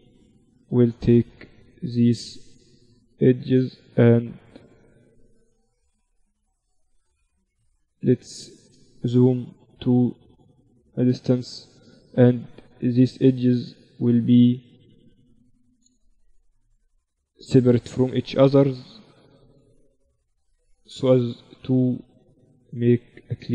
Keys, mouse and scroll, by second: 1.4-3.2 right drag, 3.0-6.8 drag, 4.2-6.0 right drag, 7.2-7.6 ctrl+z, 8.0 ctrl+z, 9.0 shift+b, 10.9 click, 11.9-13.8 right drag, 12.6-14.8 drag, 14.8-16.6 right drag, 15.2-17.0 drag, 17.0-19.5 middle drag, 19.5-23.4 right drag, 22.2-23.5 drag.